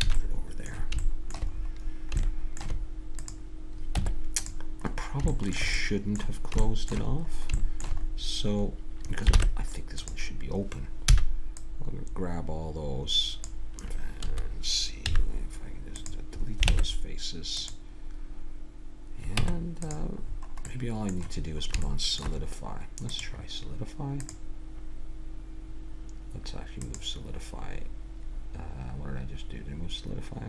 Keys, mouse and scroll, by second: 0.0 a, 0.1 click, 0.3 middle click, 1.0 middle click, 3.2 right click, 3.9 Tab, 4.9 middle click, 9.4 ctrl+Tab, 11.1 c, 15.1 x, 16.7 ctrl+Tab, 19.4 Tab, 23.1-26.1 drag, 26.8-30.4 drag.